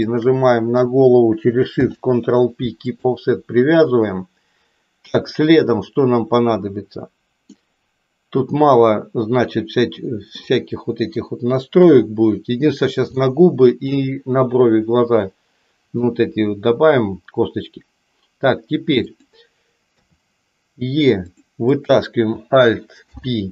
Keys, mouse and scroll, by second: 0.2 shift+click, 1.7 ctrl+p, 7.6-10.6 middle drag, 11.7 KP_3, 13.2 shift+middle click, 19.0 click, 19.9 e, 21.6 click, 22.9 alt+p.